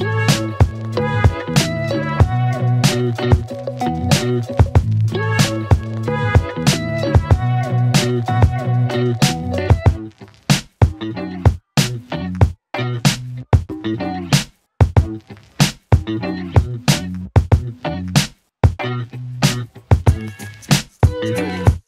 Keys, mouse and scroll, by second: 10.1-14.0 click, 14.9 z, 15.2-16.5 click.